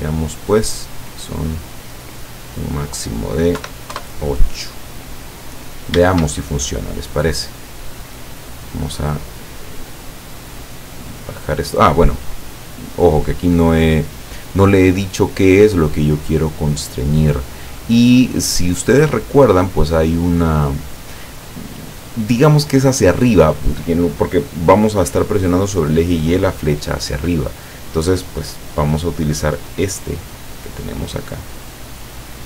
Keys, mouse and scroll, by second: 2.6 click, 3.6 KP_8, 4.0 KP_Enter, 5.6-5.9 scroll up 1, 6.4-7.4 shift+middle drag, 7.4 scroll up 2, 8.0 scroll down 2, 11.0 click, 12.1 scroll down 2, 12.6 scroll down 2, 14.2-17.4 drag, 18.6-22.3 drag, 31.5-32.4 drag.